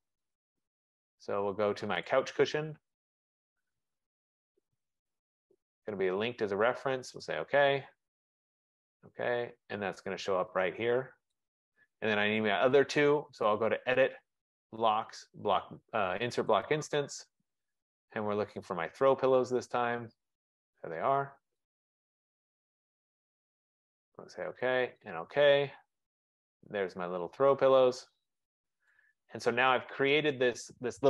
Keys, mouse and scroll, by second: 0.4 click, 2.2 click, 3.4 click, 5.7 click, 6.4 click, 7.3 click, 8.9 click, 11.7 click, 18.8 click, 20.6 click, 24.2 click, 25.3 click, 27.5 click, 28.5 middle click, 28.7 middle click, 28.9 middle click, 30.1 right click, 30.6 middle click, 30.8 middle click.